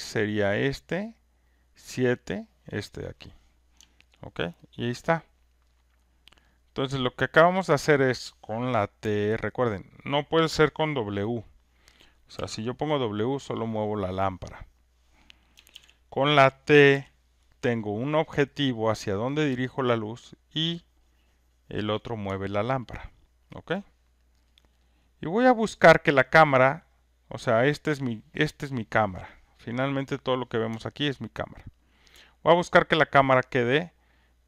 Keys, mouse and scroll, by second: 0.2 click, 1.2 click, 1.9 click, 4.4 alt+right click, 5.0 alt+click, 5.1 alt+click, 5.6 alt+right click, 5.9 alt+scroll, 6.3 alt+right click, 6.3 alt+middle click, 6.8 alt+middle click, 7.2 alt+scroll, 7.3 alt+click, 7.7 alt+right click, 7.9 alt+middle click, 8.2 alt+middle click, 14.7 click, 15.7 ctrl+z, 19.1 click, 22.2 click, 22.9 alt+right click, 23.4 alt+click, 24.3 alt+middle click, 24.6 alt+middle click, 25.0 alt+click, 25.6 alt+right click, 26.0 alt+middle click, 26.4 alt+middle click, 26.7 alt+click, 27.4 alt+right click, 27.9 alt+click, 31.8 alt+right click, 32.2 alt+middle click, 32.6 alt+right click, 33.2 alt+click.